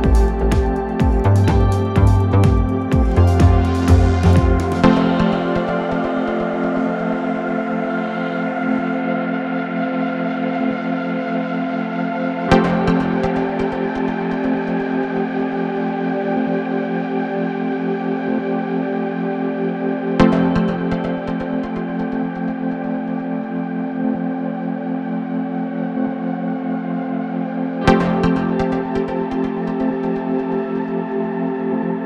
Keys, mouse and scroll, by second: 9.7-15.4 drag, 18.4-21.8 middle drag, 18.4-19.0 scroll up 1, 19.9-21.6 scroll up 1.